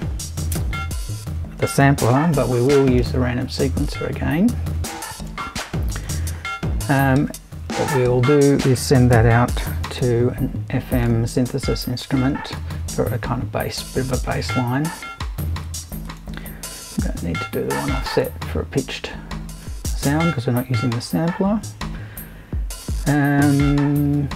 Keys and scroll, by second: 2.3 super+c, 3.0 super+v, 7.6 super+i, 8.9-10.5 typing, 16.8 BackSpace, 17.0 0.